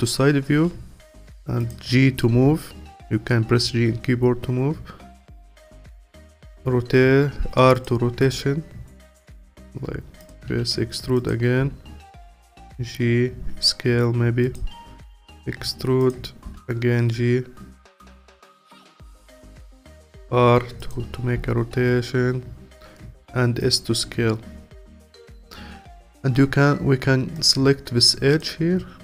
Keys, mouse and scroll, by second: 0.5 g, 2.3 g, 6.2 r, 8.2 g, 9.3 r, 10.5 e, 11.6 g, 13.4 s, 15.2 e, 16.4 g, 19.3 r, 21.3 s, 24.3-24.9 scroll up 1, 24.9 alt+middle click, 25.8-27.3 scroll up 1, 27.3-28.4 drag.